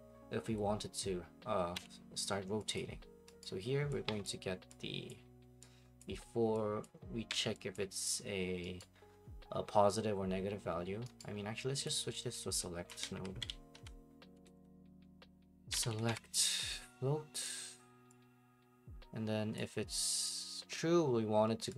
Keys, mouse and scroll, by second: 1.7 Escape, 2.7 click, 3.4 right click, 4.2 click, 5.1 click, 6.0 click, 6.8 click, 7.3 Delete, 7.7 click, 8.8 right click, 11.2 right click, 11.3 scroll, 11.8 click, 12.9 click, 12.9-16.6 typing, 17.4 click.